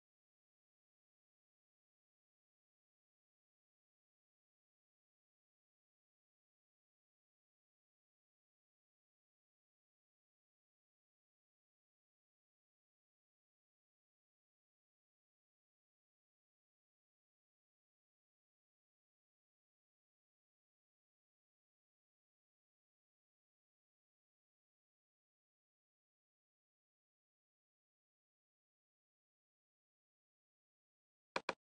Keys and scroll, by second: 0.0-11.9 typing, 15.3 alt+`, 22.2 alt+`, 25.4 alt+`, 29.9 alt+`.